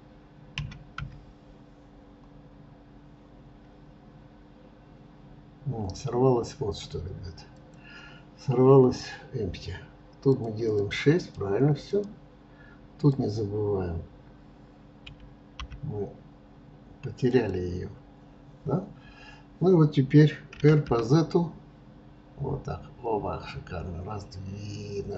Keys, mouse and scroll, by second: 10.3-12.2 drag, 13.0-16.0 drag.